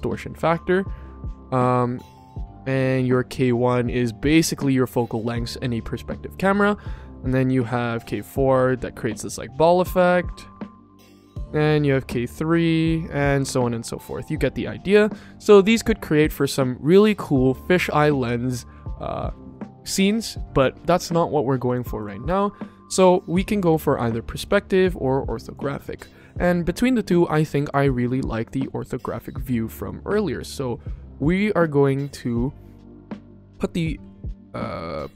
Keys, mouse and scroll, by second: 0.4-2.3 drag, 6.3 middle click, 7.0-11.3 drag, 11.6-13.4 drag, 21.6 click, 23.8-24.4 drag, 25.3 click, 27.0-27.6 drag, 28.3-29.4 middle drag, 29.7-32.0 shift+middle drag, 32.7 shift+middle click, 33.3 ctrl+middle click.